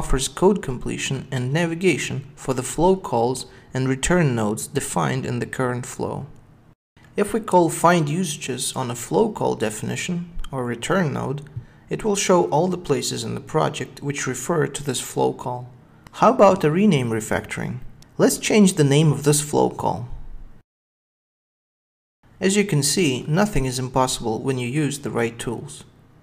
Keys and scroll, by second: 3.3 Tab, 4.9 super+b, 10.2 alt+super+F7, 22.4 super+b.